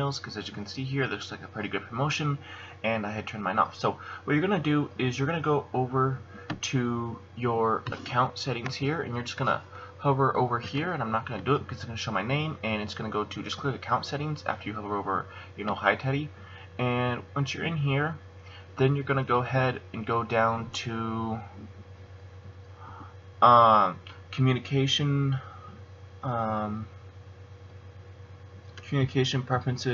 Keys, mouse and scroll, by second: 4.0 click, 17.3 click.